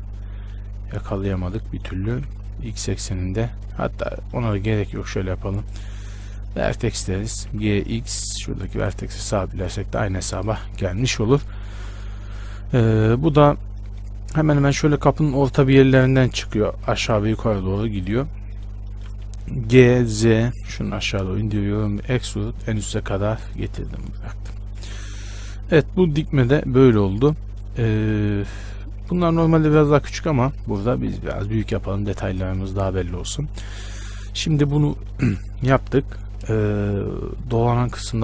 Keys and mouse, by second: 0.8-2.2 middle drag, 2.2 g, 4.6-5.8 middle drag, 5.8-8.0 drag, 7.7 g, 9.8 z, 10.7 shift+space, 12.0 z, 17.0-18.8 drag, 19.9 g, 22.3 e, 24.3 Tab, 24.8 a.